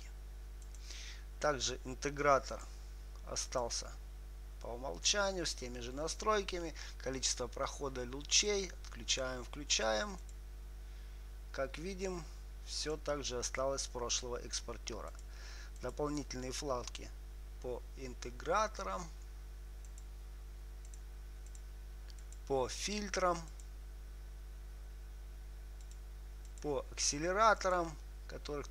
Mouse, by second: 15.4-19.5 drag, 19.6-28.7 drag.